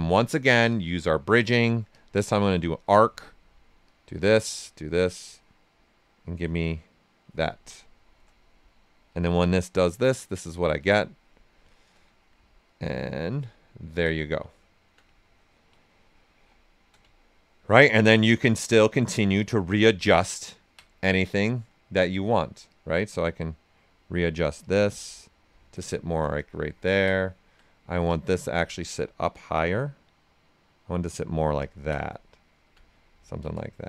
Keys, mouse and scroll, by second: 1.9 click, 2.4 space, 3.8 click, 7.9-9.0 ctrl+right drag, 9.0 d, 9.4 right click, 10.7 click, 11.3-12.6 right drag, 11.9 typing, 12.6 click, 13.4 ctrl+right click, 15.1 ctrl+right click, 16.3 shift+f, 17.1 ctrl+right click, 17.7 ctrl+click, 17.9 ctrl+space, 19.4 w, 19.9-22.6 ctrl+right drag, 22.0 typing, 22.6-24.6 drag, 24.6 click, 26.3 ctrl+space, 28.0-31.5 alt+drag, 32.0 alt+right click, 33.7 shift+f.